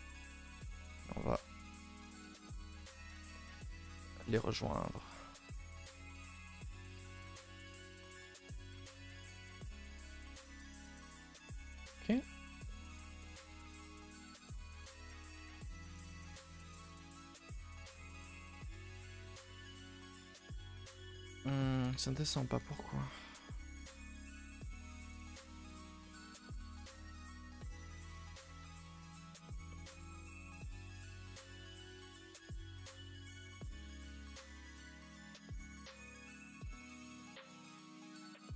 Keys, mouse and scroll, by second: 1.3 k, 3.3-4.4 middle drag, 4.4 1, 4.7 middle click, 4.9 a, 5.0 a, 5.6 k, 7.1 middle click, 7.7 k, 9.9 middle click, 10.7 a, 10.8 a, 10.9 middle click, 11.2 scroll down 2, 11.3-12.4 middle drag, 12.4 scroll down 1, 12.6 middle click, 13.0 scroll down 1, 13.2-16.0 middle drag, 16.0 a, 16.2 a, 16.3 middle click, 16.5 3, 17.0 click, 17.4 middle click, 17.7 shift+click, 17.9 shift+click, 18.1 shift+click, 18.5 middle click, 19.5 g, 21.0-22.5 middle drag, 22.5 g, 23.8 r, 24.4 g, 26.0 middle click, 26.9 g, 27.9 middle click, 28.1-28.6 scroll up 4, 28.6 r, 29.6 middle click, 30.0 1, 30.5 click, 30.7 g, 31.7 click, 31.8 g, 32.2 middle click, 33.0 g, 33.5 middle click, 34.1 g, 35.0 click, 35.1 g, 35.6 middle click, 36.2 scroll down 2, 36.5 middle click, 36.9 scroll up 2, 37.1-38.3 middle drag, 38.3 click.